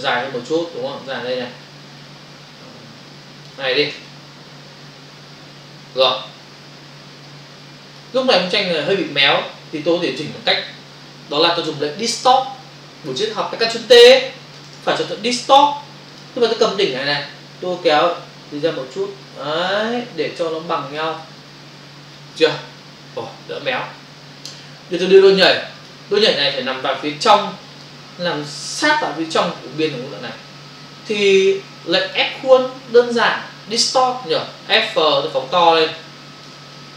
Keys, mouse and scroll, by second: 5.8 Return, 7.3 click, 14.7 right click, 16.1 click, 17.7 click, 21.6 Return, 25.4 click, 25.8 click, 25.8 double click, 26.6 click, 31.7 click, 36.0 ctrl+click, 36.8 click.